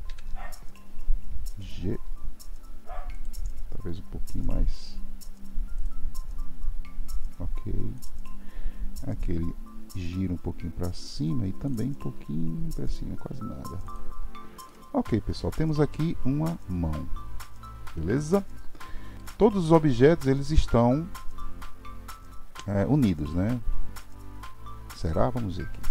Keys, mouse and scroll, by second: 0.0 KP_3, 1.5 g, 7.9 click, 11.6 click, 12.1 r, 14.3 scroll down 1, 14.6-17.8 middle drag, 25.0 click.